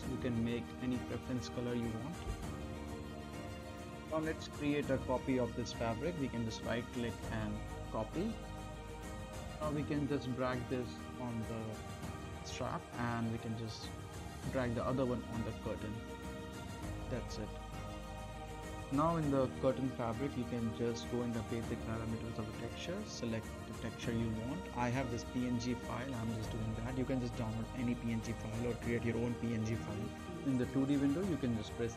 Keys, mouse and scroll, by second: 0.1-3.5 typing, 3.9 click, 6.0 click, 6.0 click, 6.4 right click, 8.2-11.3 drag, 19.5-20.9 scroll down 1, 21.4 click, 22.5-23.5 scroll down 1, 23.5 click, 24.4-25.4 scroll down 1, 26.3 click, 27.6 scroll up 1, 27.9-28.8 right click, 28.9-29.2 middle click, 29.1 scroll up 1, 29.3 middle click, 29.9 t, 30.7-31.9 drag.